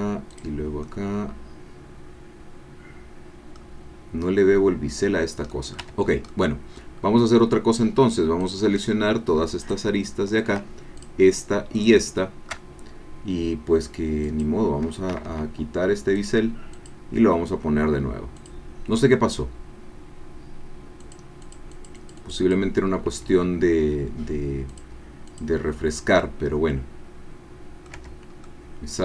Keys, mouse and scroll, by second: 0.4 click, 0.8 click, 1.4-4.3 right drag, 5.5 right click, 5.8 Tab, 6.3 right click, 7.0-7.3 scroll up 1, 8.6 click, 9.6 alt+shift+click, 11.0 alt+shift+click, 14.2 click, 15.1 Escape, 16.2 click, 16.7 click, 18.3 click, 21.0 click, 21.5-22.6 drag, 24.7 click, 25.3 click, 26.2-28.2 middle drag, 28.0 Tab, 28.5-29.0 middle drag.